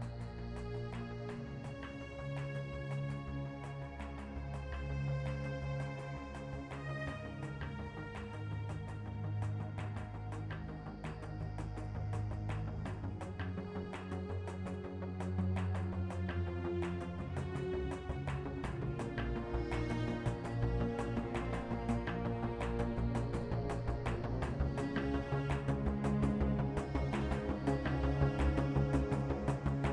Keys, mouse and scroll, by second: 0.5 ctrl+Tab, 1.6 ctrl+Tab, 2.3 e, 2.6 e, 5.9 e, 8.1 g, 9.2 middle click, 10.2 e, 11.0 ctrl+Tab, 12.1 ctrl+r, 13.3 g, 15.3 shift+a, 17.9 Tab, 18.4 Tab, 18.6 space, 19.0 ctrl+Tab, 19.9 ctrl+Tab, 20.3 z, 20.8 f, 25.1 z, 26.8 middle click, 28.6 ctrl+r, 29.6 Tab.